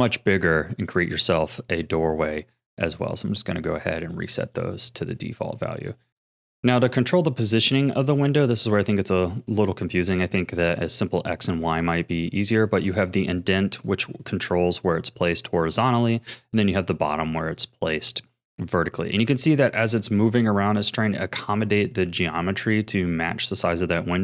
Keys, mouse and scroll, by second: 2.8-5.7 right drag, 5.7-6.0 scroll down 3, 6.0-12.5 shift+middle drag, 12.8-15.8 drag, 16.2-19.3 drag.